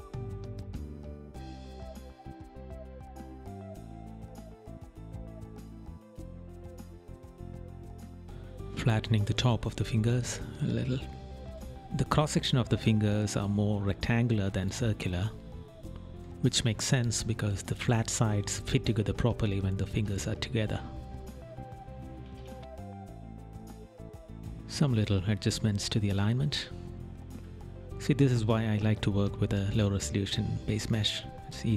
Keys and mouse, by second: 1.7 right click, 2.8 right click, 3.7 right click, 5.0 right click, 5.5 right click, 6.3 right click, 7.0 right click, 7.9 right click, 19.2 right click, 19.6 right click, 20.6 right click, 26.2 right click, 27.4 right click, 28.4 right click, 29.3 right click, 29.9 right click, 31.4 right click.